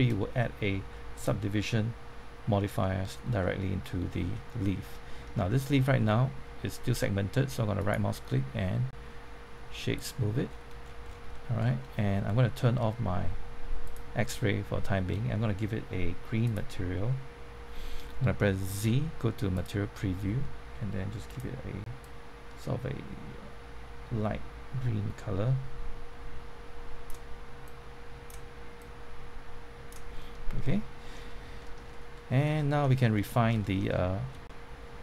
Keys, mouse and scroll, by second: 1.1 click, 2.8 middle click, 4.0 scroll up 1, 4.3 middle click, 4.9 shift+middle click, 5.6-6.3 scroll up 2, 7.7 right click, 9.9 click, 10.4-10.8 scroll down 1, 11.3 shift+middle click, 11.6 scroll up 1, 11.9 middle click, 13.8 click, 14.2-15.5 middle drag, 16.4 click, 18.7 z, 19.5-30.2 drag, 30.2 middle click, 31.6 shift+middle click, 32.6 shift+middle click, 32.8-33.2 scroll up 1, 33.2 middle click, 33.6 shift+middle click.